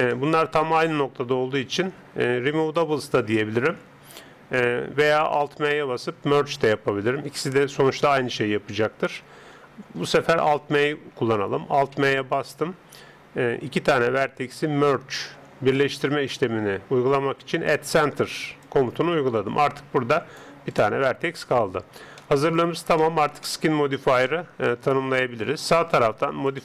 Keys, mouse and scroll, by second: 11.7 alt+m, 20.1 right click, 22.1-26.5 middle drag, 26.5-26.6 drag.